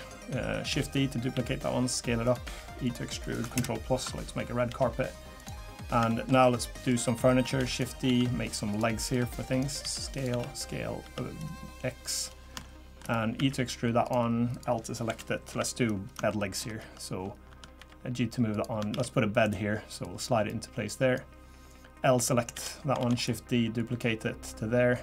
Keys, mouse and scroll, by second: 0.7 shift+d, 2.4 e, 3.5 ctrl+KP_Add, 4.7 g, 5.7 middle click, 6.1 shift+middle click, 6.9 click, 7.6 shift+d, 8.0 s, 9.1 click, 9.8 s, 10.3 s, 12.3-12.6 scroll up 2, 12.6 shift+middle click, 13.4 e, 14.5 click, 15.1 l, 15.5 KP_7, 16.3 shift+middle click, 17.8 g, 18.9 shift+d, 20.0 click, 22.5 l, 23.0 shift+d, 23.8 click.